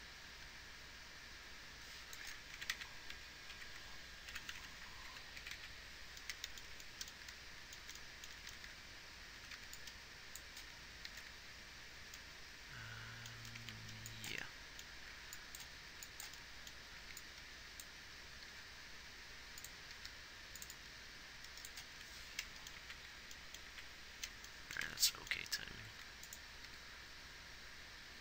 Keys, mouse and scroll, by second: 3.0 Right, 3.2 Right, 3.9 Right, 4.7 Left, 5.0 Left, 5.4 Left, 5.8 Right, 6.0 Right, 7.6-10.9 typing, 11.4 alt+r, 13.9 a, 15.4 b, 18.9 b, 18.9 g, 20.2 g, 22.3 z, 23.2 Right, 24.1 Right, 26.3 a, 27.0 g.